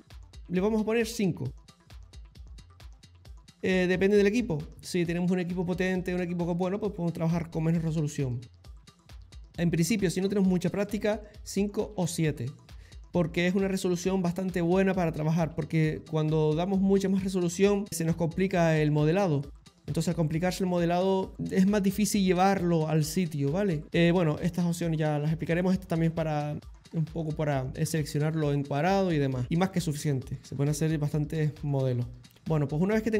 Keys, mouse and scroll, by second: 23.9 middle click, 29.4 shift+middle click, 29.7 middle click, 32.3 shift+middle click, 32.8 middle click.